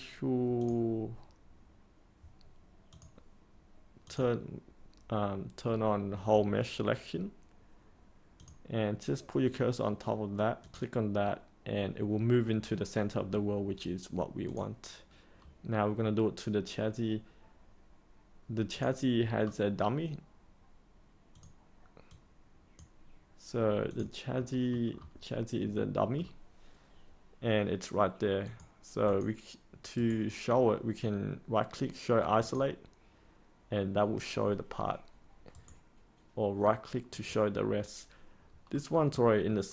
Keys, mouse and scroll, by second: 19.4-20.2 scroll down 1, 21.3-23.2 drag, 24.3 middle click, 24.8-25.7 scroll down 1, 25.7 middle click, 28.4 click, 29.9 right click, 32.3 click, 35.5 right click, 37.0 click, 38.7 middle click.